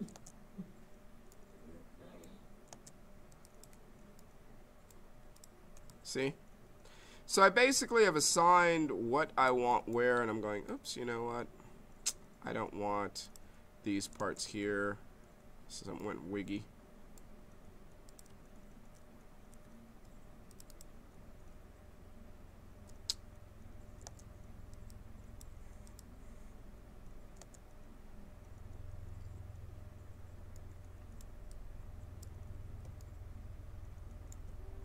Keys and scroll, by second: 0.1 space, 2.7 space, 14.2 space, 19.4 q, 24.0 space, 27.3 space.